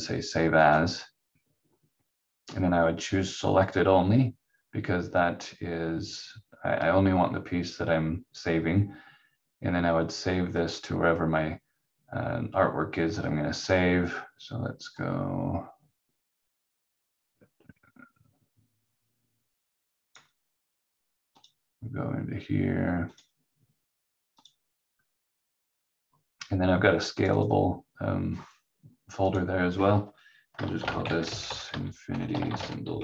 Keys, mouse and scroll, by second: 10.5 click, 30.5-33.0 typing.